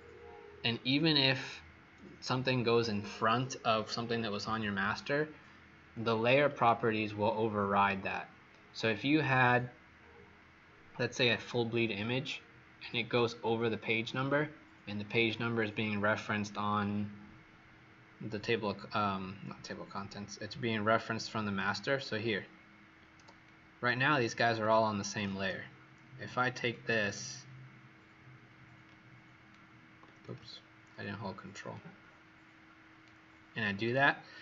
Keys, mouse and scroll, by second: 18.4-19.9 scroll up 20, 20.6-21.2 alt+scroll down 3, 21.7 scroll up 3, 22.5 alt+scroll up 1, 23.2-23.7 alt+scroll up 6, 26.6 shift+click, 31.7 ctrl+shift+click.